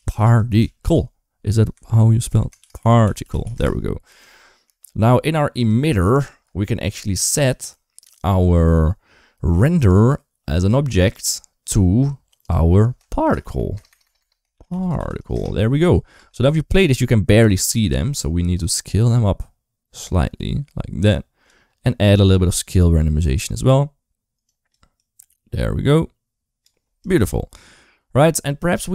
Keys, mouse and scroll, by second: 4.2 shift+middle drag, 5.4 click, 5.9 shift+middle click, 9.6-10.9 drag, 12.4-15.2 drag, 13.7 BackSpace, 13.8 BackSpace, 16.0 space, 16.3 space, 18.5-21.4 shift+drag, 22.1-24.2 drag, 24.8-26.5 drag.